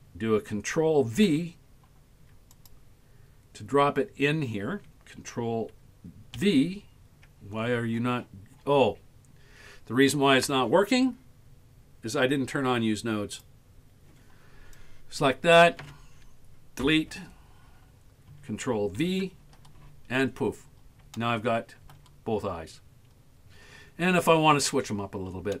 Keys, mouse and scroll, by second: 1.3 ctrl+v, 2.6 click, 6.4 ctrl+v, 7.6-8.3 scroll down 16, 8.3-10.2 scroll up 15, 13.4 click, 14.8 click, 16.8 Delete, 19.0 ctrl+v, 20.3-20.7 scroll up 5, 21.2 shift+middle click, 22.3 scroll up 1, 24.5-25.6 scroll up 11.